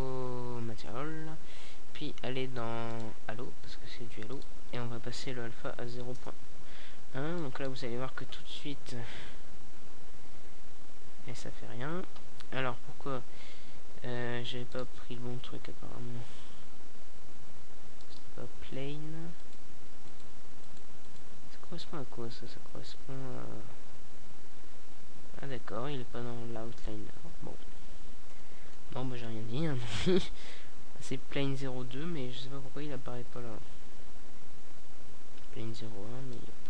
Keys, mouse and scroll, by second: 3.0 click, 3.2 click, 3.5-4.8 right drag, 4.8-6.1 drag, 6.1-9.0 right drag, 6.2 click, 9.0 click, 9.8-11.2 middle drag, 11.6-15.1 middle drag, 15.2-22.9 middle drag, 22.9-24.2 drag, 26.3 KP_0.